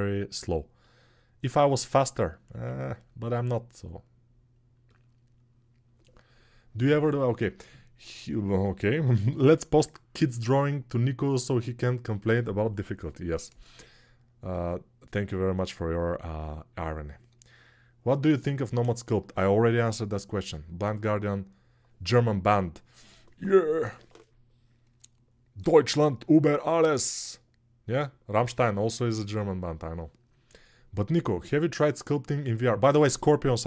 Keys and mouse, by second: 0.6-2.6 middle drag, 2.2 1, 2.6-4.6 drag, 4.6-33.6 middle drag.